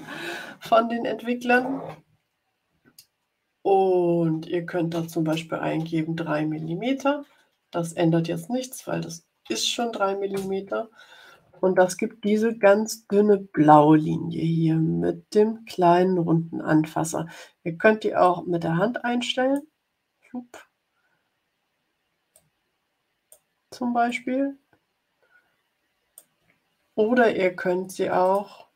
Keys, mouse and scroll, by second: 4.9 3, 6.6 m, 9.4 m, 10.3 Return, 18.1-19.7 drag, 22.3-23.4 drag, 24.0-26.3 drag, 28.1 click.